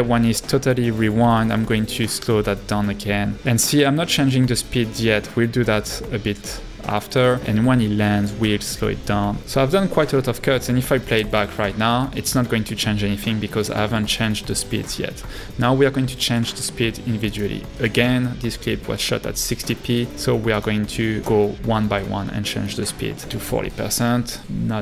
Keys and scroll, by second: 1.3 b, 8.3 b, 10.2 a, 14.3 space, 23.0-23.8 typing.